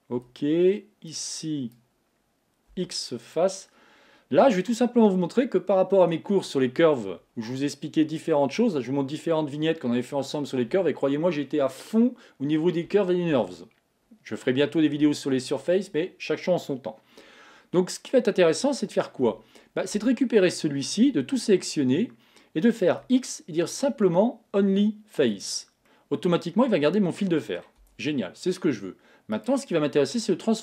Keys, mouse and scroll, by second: 0.3 b, 2.8 x, 5.2-8.3 middle drag, 18.3-18.9 scroll up 1, 18.9-19.3 scroll up 1, 19.3 Tab, 20.0 Tab, 21.1 a, 25.9-28.0 middle drag, 28.0 Tab, 29.4-30.6 right drag.